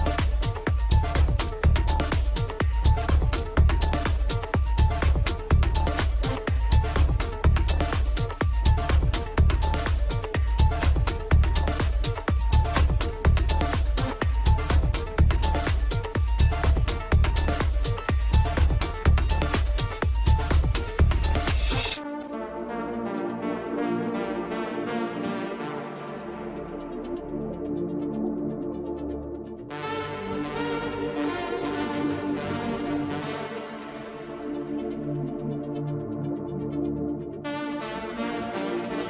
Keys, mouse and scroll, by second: 1.4 click, 1.7-2.8 middle drag, 2.7 s, 2.8 s, 9.4 click, 10.5 click, 12.4 click, 17.6 click, 18.5 click, 20.9-21.8 scroll up 5, 21.8-24.3 middle drag, 24.3 click, 25.0-33.0 middle drag, 33.0-34.2 drag, 36.1 click, 38.2 click.